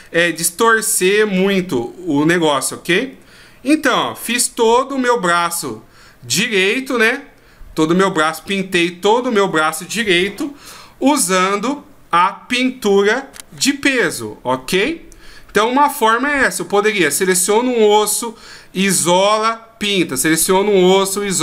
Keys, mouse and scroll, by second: 0.3 r, 3.9 right click, 4.2 r, 14.8 middle click.